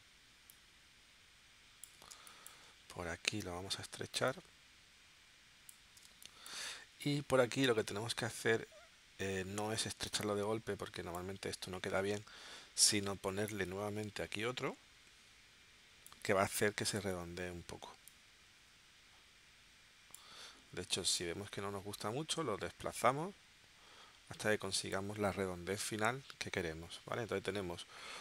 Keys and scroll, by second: 2.1 space, 6.1 space, 11.8 super+z.